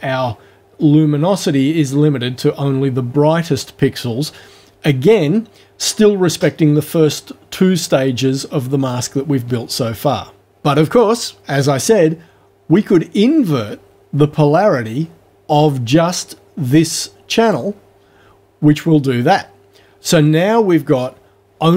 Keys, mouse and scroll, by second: 17.5 click.